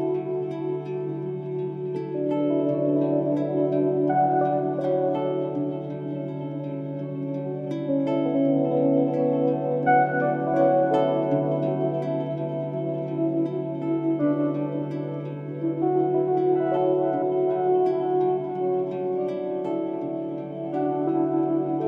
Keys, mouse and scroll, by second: 0.1 right click, 0.5-10.2 drag, 10.3-12.3 drag, 12.3 right click, 12.7-18.2 drag.